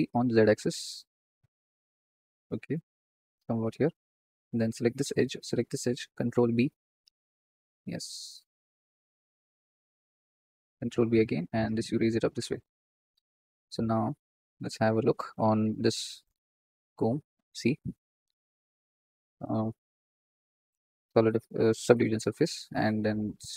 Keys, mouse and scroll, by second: 4.1 click, 4.5 alt+shift+click, 5.4 alt+shift+click, 6.2 ctrl+b, 9.2 click, 10.8 ctrl+b, 12.6 Tab, 14.4 z, 18.0 ctrl+space, 20.4-23.3 drag, 23.3 right click.